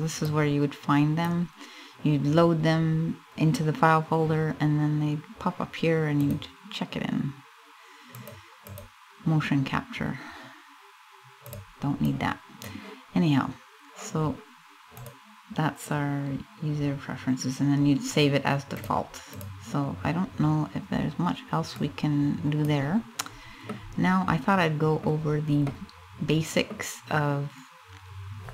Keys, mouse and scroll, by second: 19.0 click, 21.3 click, 22.6 scroll up 1, 23.2 middle click, 24.5 middle click, 24.8-25.3 scroll down 2, 25.3 middle click, 25.6 middle click, 25.7 middle click, 26.2 middle click, 26.4 scroll up 1.